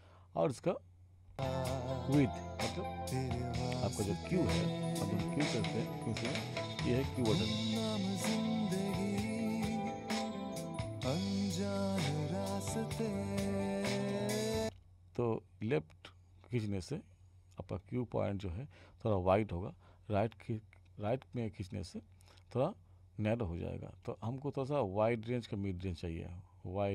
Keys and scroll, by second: 1.3 space, 14.6 space.